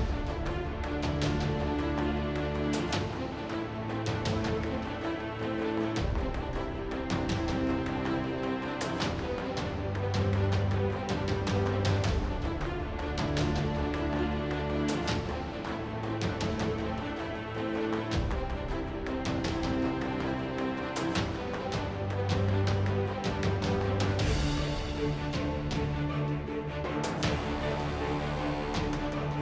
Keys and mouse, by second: 0.1-0.8 middle drag, 1.5 ctrl+1, 1.8 Tab, 2.4 ctrl+Tab, 2.8-3.3 drag, 3.7 click, 4.0 Tab, 4.5 t, 4.7 click, 4.8 t, 5.4 Tab, 5.6 z, 5.8 z, 6.2 Tab, 7.1 Tab, 7.4 Tab, 7.7 KP_7, 8.2 Tab, 9.0 Tab, 9.3 KP_7, 10.3 shift+a, 10.7 Tab, 10.9 g, 12.0 g, 12.8 g, 13.5 z, 14.2 ctrl+Tab, 14.4 click, 14.6 g, 15.4 click, 16.1 k, 20.3-20.8 drag, 20.7 x, 21.1 ctrl+Tab, 21.3-22.0 drag, 21.8 s, 23.6 g, 24.7-26.6 typing, 26.2 drag, 27.8-29.4 typing.